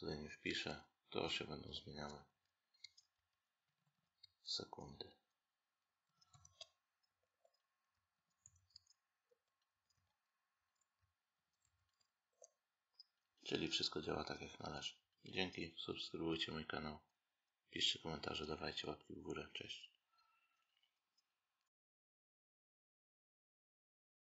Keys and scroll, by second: 0.3 Left, 1.6 Down, 1.8 Right, 2.7 Left, 3.0 Up, 4.1 Left, 4.7 Right, 6.9 Down, 9.2 Down, 10.4 Up, 12.2 Down.